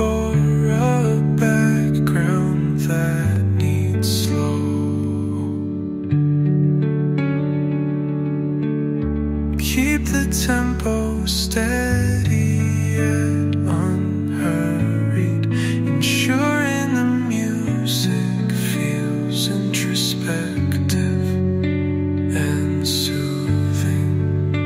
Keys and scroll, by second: 0.4 space, 4.9 shift+Page_Down, 15.1 space.